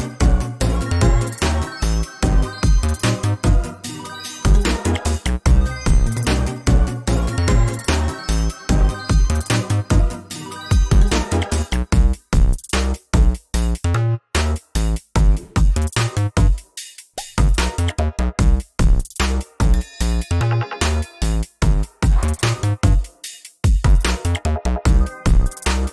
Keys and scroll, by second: 11.7 ctrl+space, 18.2 ctrl+space, 22.1 ctrl+space, 23.8 ctrl+space.